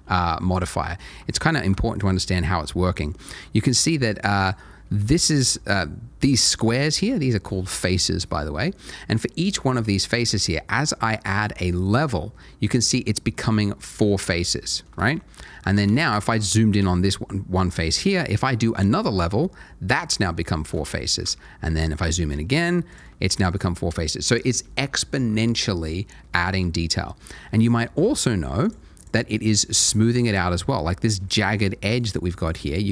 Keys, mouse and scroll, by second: 0.6 shift+middle click, 1.3 shift+middle click, 3.2-4.4 scroll up 1, 4.4 click, 5.1 shift+middle click, 11.9 click, 14.0-14.3 scroll up 1, 14.4 shift+middle click, 15.1 shift+scroll up 1, 15.5 shift+middle click, 15.9 ctrl+middle click, 19.0 click, 20.4 shift+middle click, 21.4 shift+middle click, 22.9 click, 23.3 shift+middle click, 23.8 scroll down 1, 26.8 shift+middle click, 28.6 click, 29.0 double click, 29.5 click, 32.7 click.